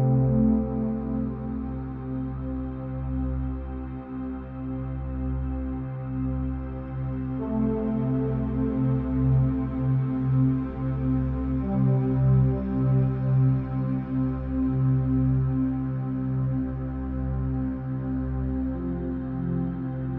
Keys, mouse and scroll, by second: 0.4-2.3 middle drag, 2.3 shift+click, 3.0-4.1 middle drag, 4.1 shift+click, 5.1 shift+click, 7.3 ctrl+z, 7.8 shift+click, 8.9 ctrl+l, 10.7 KP_0, 12.4 click, 14.0 click, 14.9-16.0 drag, 18.1 click, 18.9 click.